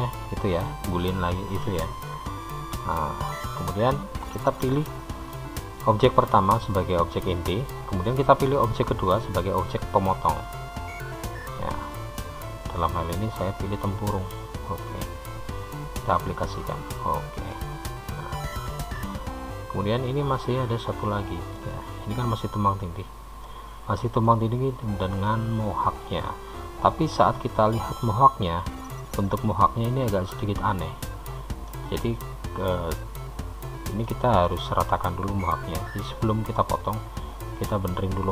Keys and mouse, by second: 1.0 click, 18.3-23.5 middle drag, 23.7-29.3 middle drag, 32.6-35.9 middle drag.